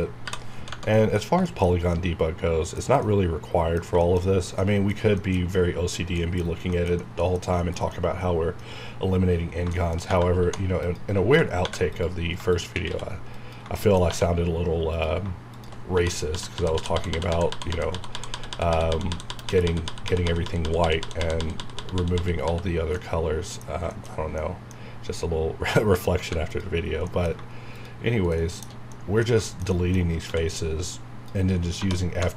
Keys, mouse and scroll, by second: 0.2 j, 0.4 scroll down 1, 0.7 Tab, 0.7 Right, 0.9 middle click, 1.1 scroll down 1, 1.5-4.0 shift+middle drag, 4.6 middle click, 5.5 scroll up 1, 5.9 scroll down 1, 6.2 middle click, 6.5 scroll down 1, 6.7-9.3 shift+middle drag, 9.2 scroll up 1, 9.7 shift+middle click, 10.0 shift+scroll up 1, 10.5 2, 10.8 click, 11.6 3, 11.9 click, 12.9 x, 13.3 click, 13.8 shift+middle click, 14.9 scroll up 1, 14.9 click, 15.9-19.2 typing, 17.7 scroll down 1, 23.0 middle click, 24.1 shift+scroll up 1, 24.4 middle click, 24.9 scroll up 1, 25.8 middle click, 26.2 3, 26.4 click, 26.8 scroll down 1, 27.2 middle click, 27.7 shift+click, 28.4 shift+middle click, 30.1 scroll up 1, 30.3 x, 30.8 click, 31.7 1.